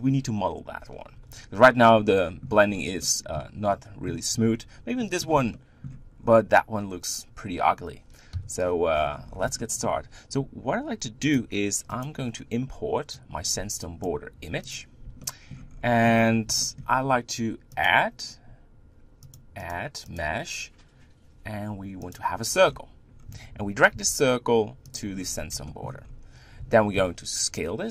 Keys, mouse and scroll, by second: 1.3 KP_1, 2.1-5.3 middle drag, 2.6-3.0 scroll up 2, 5.5 shift+middle click, 6.1 scroll up 4, 8.4 KP_1, 8.9-9.6 scroll down 12, 9.6-12.6 shift+middle drag, 15.2 shift+middle click, 15.7-16.6 scroll up 5, 16.6-17.7 shift+middle drag, 17.7-19.3 drag, 19.6-22.8 drag, 22.8-23.3 scroll down 8, 23.9 g, 25.1-25.7 scroll up 7, 25.7 shift+middle click, 26.0-26.6 scroll up 3, 26.6 Tab, 26.9 s.